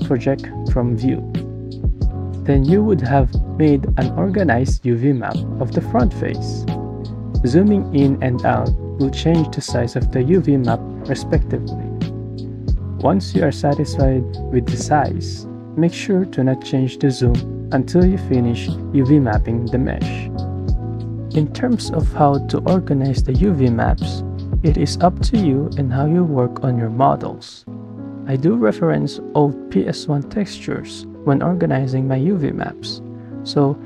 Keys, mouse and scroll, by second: 9.4 ctrl+z, 9.6 ctrl+z, 13.3 KP_1, 20.1 KP_7, 24.3 KP_9, 25.3 shift+click, 25.8 shift+click, 26.1-26.9 shift+drag, 27.3 shift+click, 27.6 shift+click, 27.8 shift+drag, 29.2 click.